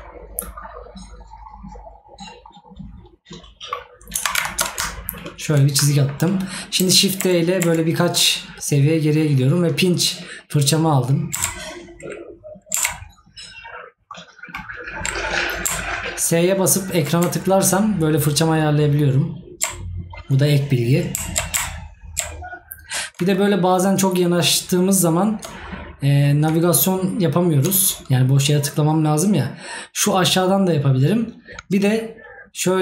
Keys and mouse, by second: 5.3 right click, 32.3 right click.